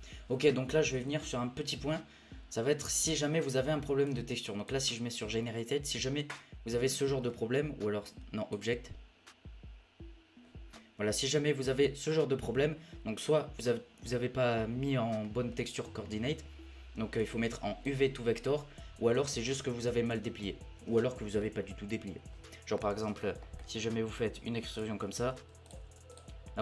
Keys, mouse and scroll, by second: 0.0-2.1 drag, 2.2-3.1 scroll down 1, 3.1-4.1 middle drag, 4.1-5.5 drag, 5.5-8.0 middle drag, 8.0-10.7 drag, 10.7-13.8 middle drag, 15.2-17.2 middle drag, 17.2-18.7 drag, 18.7-20.2 scroll up 1, 20.2-21.7 scroll up 1, 22.1-22.9 scroll up 1, 22.9 Tab, 23.1-24.7 middle drag, 24.7 click, 25.1 scroll down 3, 25.3 e, 25.7 e.